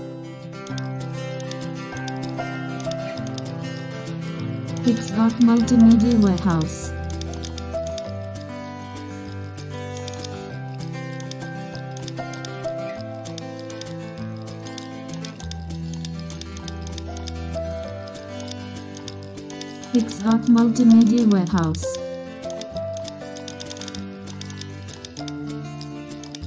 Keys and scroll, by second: 4.8 super+space, 8.0 super+0, 10.7 super+e, 19.3 alt+space, 25.4 super+0, 26.3 super+space.